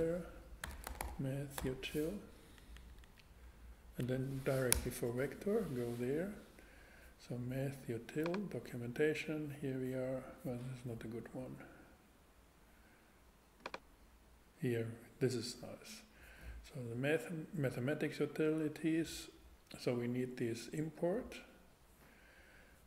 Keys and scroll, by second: 0.0-1.6 typing, 3.0 Down, 4.7 Return.